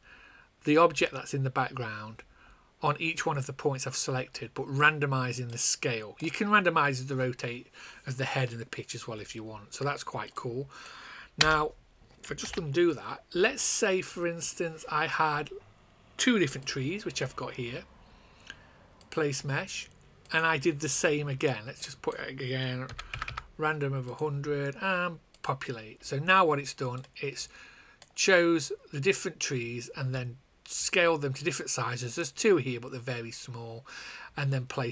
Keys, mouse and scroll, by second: 5.4 click, 10.3 click, 11.3 space, 12.4 ctrl+z, 16.5 shift+click, 22.8 KP_1, 23.1 KP_0, 24.0 click, 27.1 click.